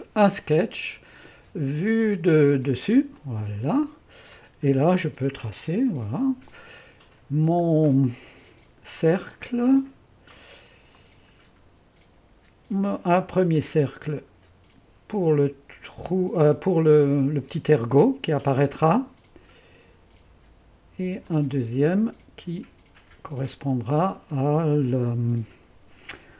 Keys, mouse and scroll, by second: 2.8-4.4 middle drag, 2.9 click, 3.4 click, 4.6-5.2 scroll up 1, 5.0-6.4 drag, 6.0 2, 8.0-9.3 drag, 11.0 click, 13.6-17.7 drag, 21.3 click, 23.3 click.